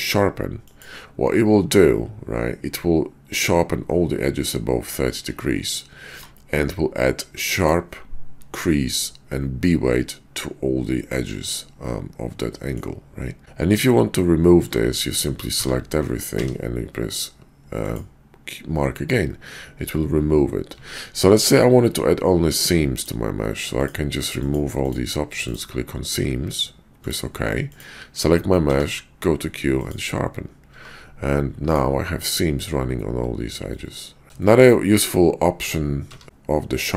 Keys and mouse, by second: 6.1 Tab, 7.4 click, 11.9 middle click, 13.4 ctrl+`, 14.4 Tab, 15.4 a, 16.3 q, 20.7 Tab, 21.3 ctrl+`, 28.5 q, 30.7 Tab, 33.7 middle click, 34.3-34.7 shift+middle drag, 36.0 q.